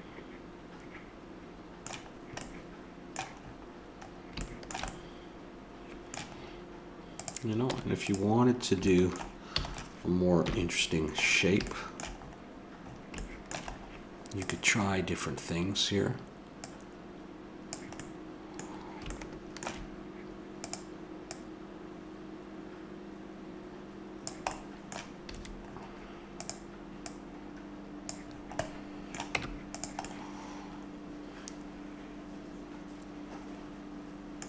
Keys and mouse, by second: 1.5 middle click, 7.1-7.7 right drag, 7.7 Tab, 7.7-8.9 drag, 9.6 a, 10.4 KP_1, 14.4 right click, 14.9 click, 14.9-16.7 middle drag, 16.7-18.0 drag, 18.1 click, 19.3 middle click, 20.6-23.0 drag, 24.5-26.4 middle drag, 25.3 a, 26.4-28.3 drag, 29.4 Tab.